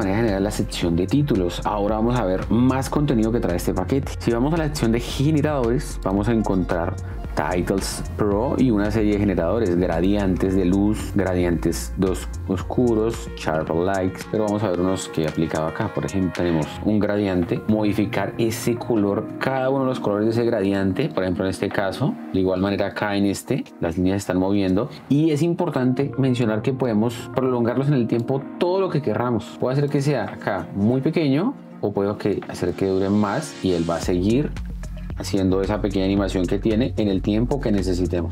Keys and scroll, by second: 15.6 space, 23.7 space, 30.3 space.